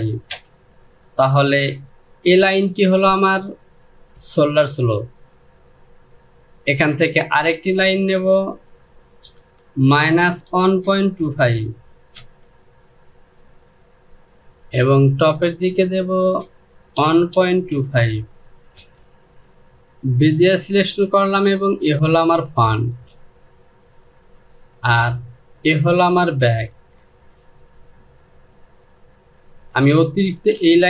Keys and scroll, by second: 0.0 Return, 9.1 Down, 9.6 KP_Subtract, 10.1 KP_1, 10.5 KP_Decimal, 10.9 KP_2, 11.1 KP_5, 11.8 Return, 16.6 KP_1, 17.0 KP_Decimal, 17.4 KP_2, 17.6 KP_5, 18.4 Return, 30.3 Delete.